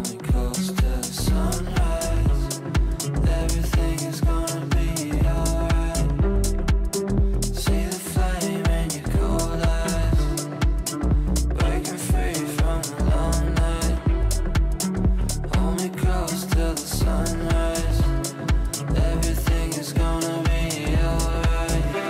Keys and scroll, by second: 2.4 e, 21.4 g.